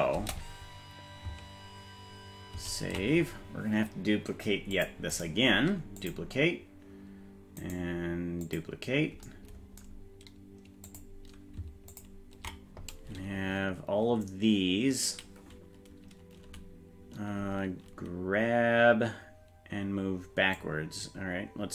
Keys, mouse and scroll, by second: 0.1 space, 2.7 ctrl+s, 4.7 click, 5.1-6.2 right drag, 7.6-8.6 right drag, 10.8 click, 11.9 ctrl+click, 20.5-21.7 drag.